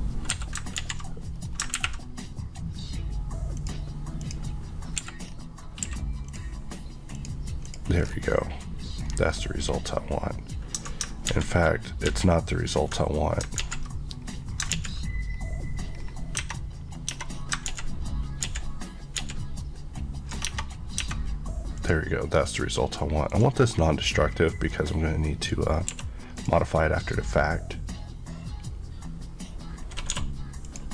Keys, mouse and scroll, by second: 0.4 Escape, 1.1 z, 1.4-1.8 scroll up 2, 3.6 click, 5.0 click, 5.1 Escape, 5.3 scroll up 1, 5.9 scroll up 1, 5.9 q, 6.3 click, 7.2 click, 8.1 scroll, 8.1-8.5 scroll down 1, 9.1 scroll up 1, 11.3 z, 13.5 ctrl+scroll up 1, 13.6 ctrl+z, 14.2 scroll down 1, 14.8 ctrl+z, 15.4 scroll up 1, 16.4 Tab, 17.4-17.7 scroll up 2, 17.7 ctrl+z, 20.5 Tab, 21.8 click, 25.9 click, 26.0 q, 26.4 click, 30.2 s, 30.7 click, 30.8 Left.